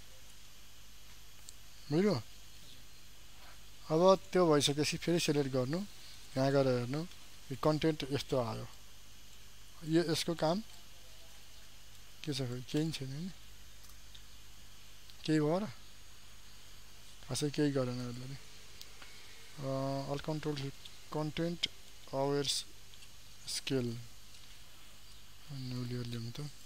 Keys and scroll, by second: 16.2 ctrl+d.